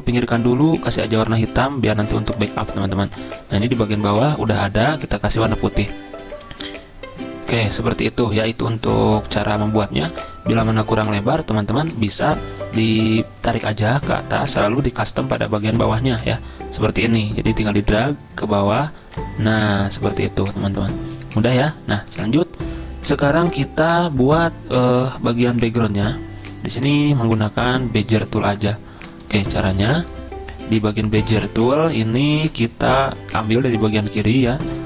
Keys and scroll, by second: 13.0 ctrl+z, 29.6 z.